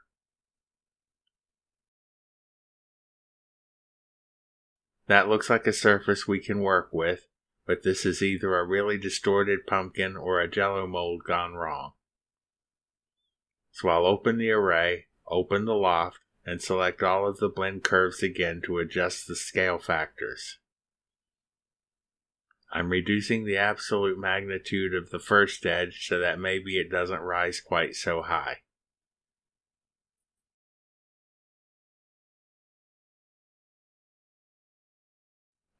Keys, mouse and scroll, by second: 0.0-1.4 typing, 0.1 Down, 2.0 Return, 2.6 Return, 4.2 click, 5.9 click, 6.9 click, 7.6 click, 8.7 click, 9.7 click, 14.7 click, 17.3 click, 18.2 click, 18.8 shift+click, 20.0-21.7 scroll up 1, 21.7 click, 22.9 -, 24.8 click, 26.8 shift+click, 27.2 shift+click, 28.3 click, 29.1 -, 29.5 ., 30.0 6, 32.7 click, 33.7-34.7 drag.